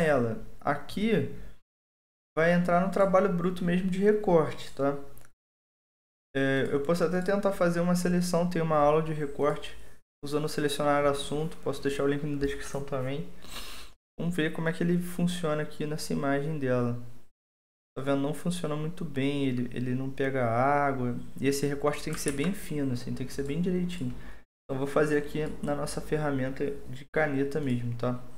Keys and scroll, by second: 22.2 ctrl+d.